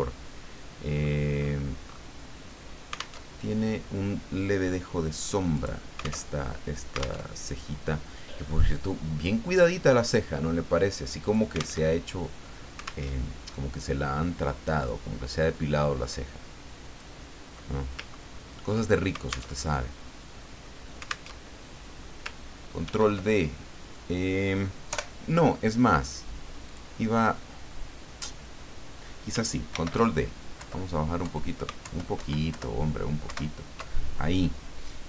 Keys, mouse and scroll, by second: 1.0-2.1 scroll up 6, 3.2 alt+Tab, 5.5 click, 6.3 alt+Tab, 7.2 alt+Tab, 8.9-11.6 drag, 11.8 alt+Tab, 13.0 alt+Tab, 14.7 click, 15.5-17.2 drag, 18.1 ctrl+scroll up 2, 19.5 alt+Tab, 21.3 alt+Tab, 22.8 ctrl+d, 24.9 Delete, 26.7 click, 29.7 ctrl+d, 30.6 Down, 31.7 alt+Up, 31.8 alt+Down, 32.2 alt+Right, 32.5 alt+Down, 33.3 alt+Up.